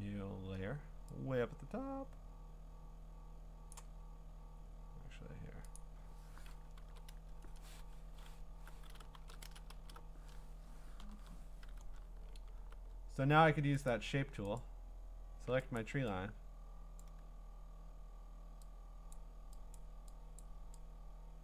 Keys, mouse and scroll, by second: 0.9-2.1 scroll up 1, 3.7 click, 3.9-4.5 scroll down 10, 4.5-5.8 scroll up 3, 5.8 click, 6.8 ctrl+n, 7.9 Escape, 9.2 ctrl+shift+n, 9.4 Return, 9.7 alt+BackSpace, 11.0 ctrl+i, 12.6 b, 13.9 click, 14.6 right click, 16.5 click, 17.1 click, 19.1 click, 19.8 click, 20.4 click.